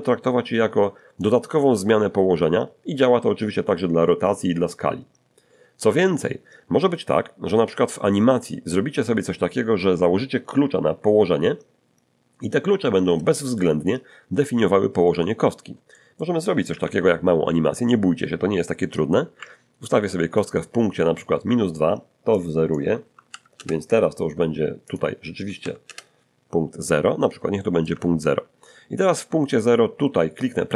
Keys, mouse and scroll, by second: 15.9 shift+middle click, 16.7 shift+1, 18.9-20.6 drag, 22.4 click, 23.3 0, 23.6 Return, 24.9 click, 25.6 0, 25.8 Return, 27.2 scroll down 1, 27.6 shift+middle click.